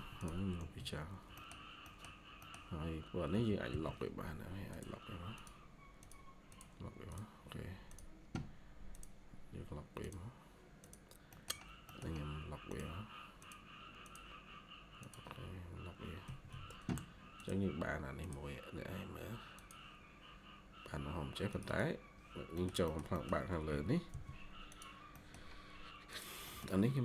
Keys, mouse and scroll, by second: 0.3-1.2 typing, 1.3 middle click, 1.4 scroll down 1, 1.7 middle click, 2.0 scroll down 1, 2.3 middle click, 3.2 typing, 11.1 scroll down 1, 11.2 middle click, 16.1 scroll down 1, 16.4 Escape, 21.6 double click, 22.4 middle click, 23.6-24.0 typing, 25.1 middle click, 26.4 middle click.